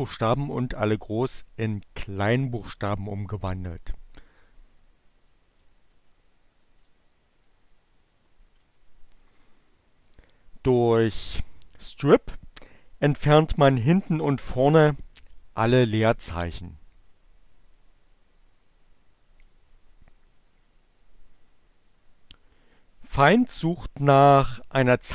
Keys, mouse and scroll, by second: 4.2-5.9 drag, 6.9 click, 17.1-19.0 drag.